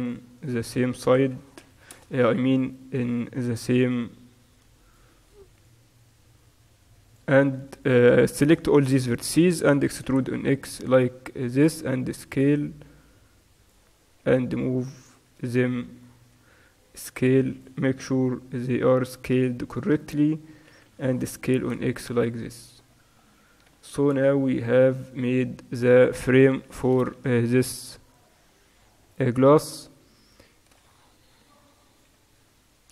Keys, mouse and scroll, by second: 1.2 s, 2.9-4.6 right drag, 3.9 g, 4.6 click, 5.7-7.8 drag, 7.8-10.2 middle drag, 10.2-11.7 drag, 10.2 e, 11.9 s, 14.3 g, 15.4 z, 16.5 s, 18.2 g, 20.7 s, 22.9 click, 23.0 middle click, 23.4 click, 24.0 z, 24.3 Tab.